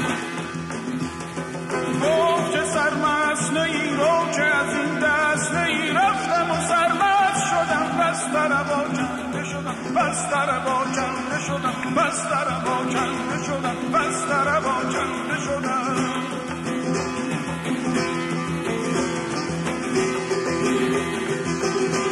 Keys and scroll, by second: 0.7 q, 2.1 w, 3.3 w, 4.5 r, 5.4 q, 9.1 w, 10.0 q.